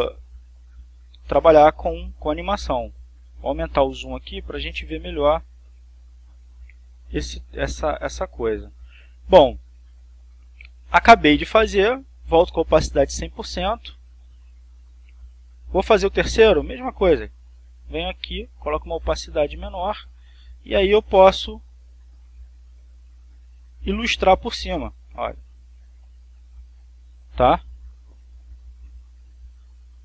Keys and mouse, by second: 0.5-1.7 drag, 2.1-3.2 drag, 4.4 click, 6.1-7.3 drag, 9.0 click, 11.9-13.2 drag, 14.4 click, 15.7-16.9 drag, 17.7 click, 19.0-20.6 drag, 21.6 click, 22.9 click, 25.0-28.4 drag, 29.1 ctrl+z.